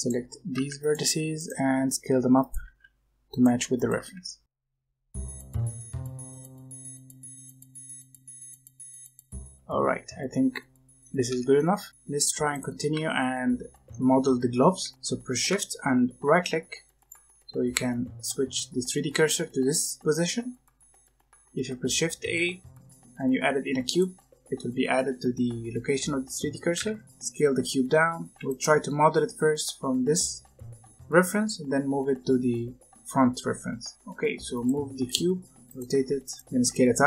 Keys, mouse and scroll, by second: 0.0-1.5 typing, 2.6-5.7 typing, 5.0 scroll down 1, 5.0 middle click, 5.7 alt+click, 6.2 middle click, 7.8 middle click, 8.2 s, 8.5 alt+click, 8.7 scroll down 1, 8.7 middle click, 9.4 alt+click, 9.5 s, 9.9 z, 10.2 middle click, 11.2 Tab, 11.4 scroll down 1, 11.5 middle click, 13.5 middle click, 14.8-16.4 shift+middle drag, 16.9-19.9 shift+right drag, 22.2 shift+a, 26.7 s, 28.3 g, 28.7-31.2 scroll down 2, 31.2-33.4 scroll down 2, 33.4-33.9 scroll up 5, 33.9 g, 34.8 r, 35.9 g, 36.3 r, 36.5 s.